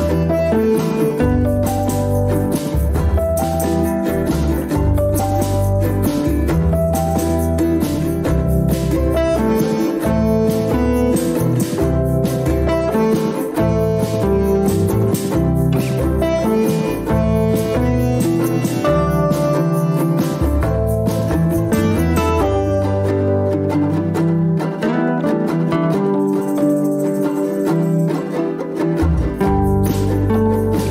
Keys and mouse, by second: 1.1 ctrl+r, 8.4-9.1 middle drag, 11.2 click, 12.7-13.2 middle drag, 13.9-15.5 middle drag, 15.8 Tab, 16.2 Tab, 16.8-18.4 middle drag, 20.1 click, 22.3-23.3 middle drag, 28.7-30.0 drag, 30.6-30.9 shift+middle drag.